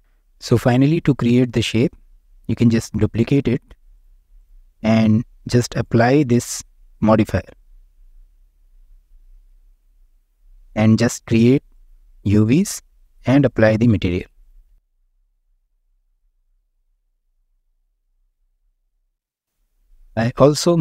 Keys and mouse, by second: 3.2 shift+d, 3.9-4.4 drag, 5.9-8.2 drag, 9.1 Tab, 10.4 a, 10.9 u, 13.7 Tab, 14.4 shift+click, 15.6 ctrl+l, 17.3 Tab, 18.2 Tab, 18.6-19.0 drag.